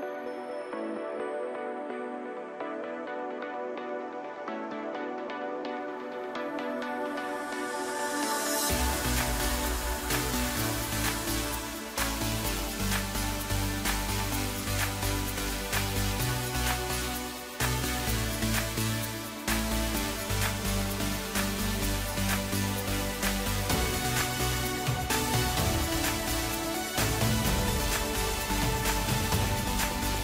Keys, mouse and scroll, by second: 0.5-1.4 scroll down 3, 1.4 click, 1.9-2.9 scroll up 1, 2.9 s, 4.9 click, 7.0-8.6 scroll down 6, 8.6-13.5 drag, 14.0-14.7 scroll down 2, 14.7-15.8 scroll up 3, 15.8-16.2 drag, 16.2 scroll down 2, 16.4-17.9 middle drag, 17.9-18.9 scroll up 2, 18.9 scroll down 1, 19.1-19.9 middle drag, 19.9 click, 20.9 drag, 21.3 right click, 22.2 scroll down 2, 22.4-22.9 middle drag, 22.9-23.8 scroll up 1, 23.8-25.3 middle drag, 25.3 KP_1, 25.9 scroll down 2, 26.4 Tab, 27.3 KP_Decimal, 28.0-28.9 scroll down 10, 29.8 g.